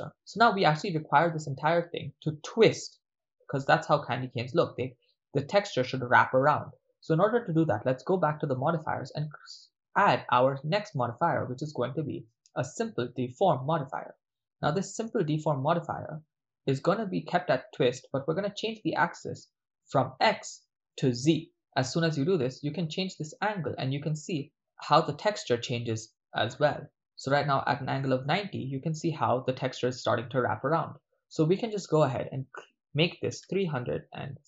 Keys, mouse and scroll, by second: 0.1-0.9 ctrl+middle drag, 4.2 ctrl+middle click, 5.0 shift+middle click, 8.4-15.0 drag, 21.5 click, 23.7-26.9 drag, 28.4-29.0 ctrl+middle drag, 31.7-34.4 drag.